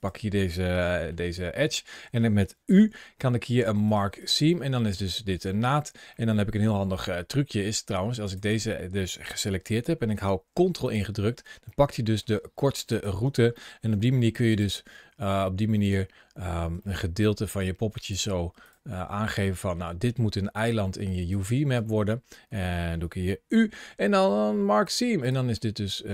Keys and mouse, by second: 0.7 shift+middle click, 1.6 shift+middle click, 2.5 u, 4.0 click, 4.4 middle click, 5.4 middle click, 6.0 middle click, 8.1 click, 9.6 shift+middle click, 11.5 middle click, 13.4 shift+middle click, 16.7 middle click, 17.8 ctrl+click, 19.4 shift+middle click, 20.4 ctrl+click, 21.1 ctrl+click, 21.7 middle click, 23.3 u, 25.5-26.1 middle drag.